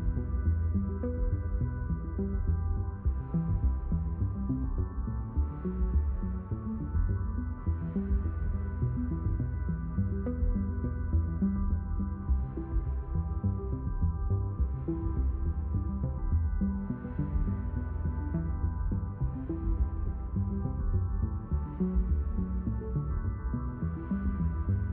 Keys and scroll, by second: 15.0-17.4 typing, 18.7 q, 19.0 w.